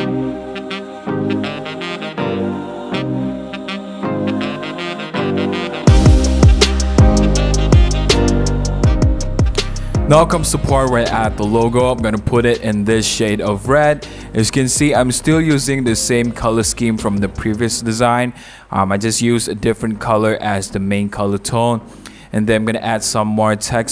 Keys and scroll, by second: 1.0-2.6 typing, 6.0 super+-, 6.2 super+0, 6.5-7.2 typing, 7.4 super+a, 7.7 super+d, 8.1 super+a, 8.2 super+c, 8.2 super+d, 8.3 super+v, 9.4-10.5 typing, 18.7 v.